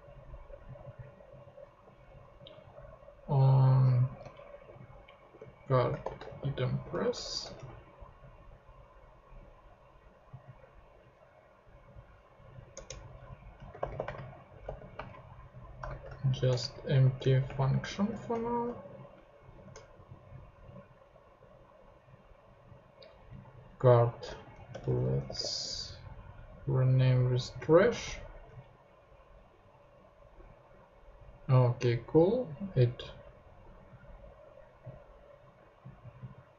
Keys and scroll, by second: 1.8 Left, 2.2 Right, 3.3 Left, 3.8 shift+Left, 4.1-6.9 typing, 7.0 alt+Left, 7.2 alt+shift+Right, 7.6 alt+shift+super+c, 8.5 shift+super+c, 12.7 Return, 13.3-14.5 typing, 14.6 super+space, 15.7-19.5 typing, 23.9-25.8 typing, 27.9 super+Tab.